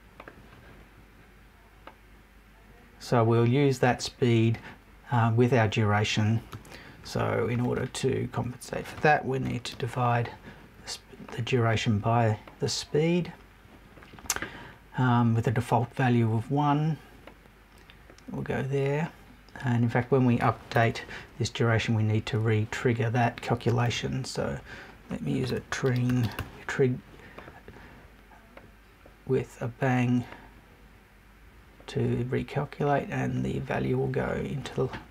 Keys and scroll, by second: 20.7 BackSpace.